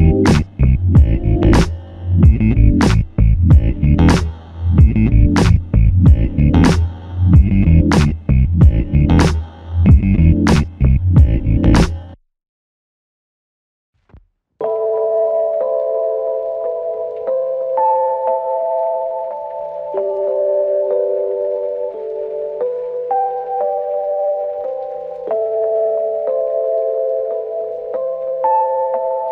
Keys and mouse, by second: 2.2 ctrl+click, 7.6 ctrl+i, 9.1 alt+click, 11.9 f, 14.4 alt+shift+click, 19.2 f, 22.6 double click, 25.3 alt+click, 27.5 double click.